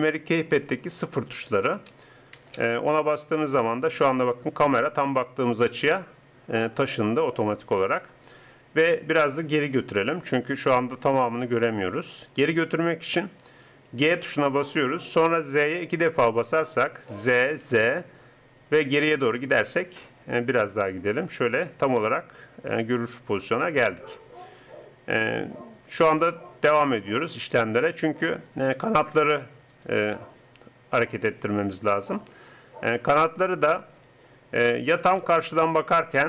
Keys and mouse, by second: 2.4 ctrl+super+KP_0, 14.0 g, 31.2 r, 35.2 KP_1.